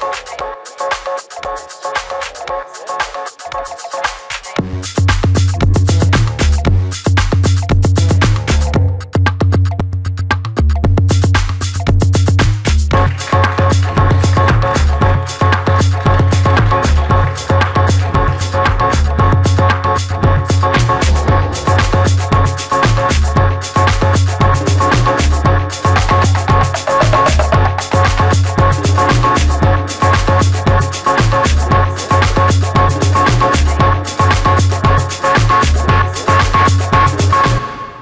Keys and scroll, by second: 5.2-6.3 typing.